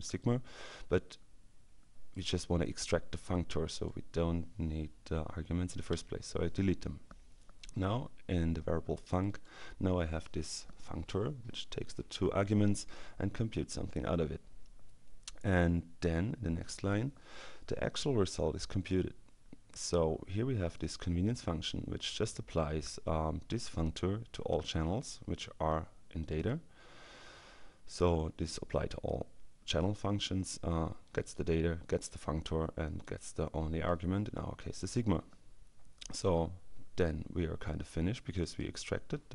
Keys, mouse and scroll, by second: 0.2-2.7 drag, 3.4-4.4 drag, 6.0 Delete, 9.0 click, 20.6 click, 26.2 click, 31.0 click, 33.0-34.0 drag, 38.4 click.